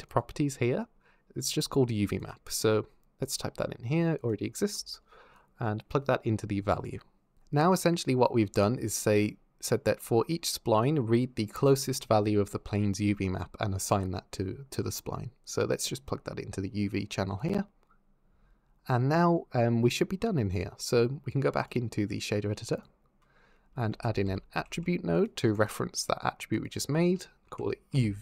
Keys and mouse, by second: 3.0-4.1 drag, 5.2 click, 9.8 click, 15.4 click, 21.2 click, 21.5-22.7 drag, 23.7 shift+a, 24.5 t, 26.4-28.1 drag.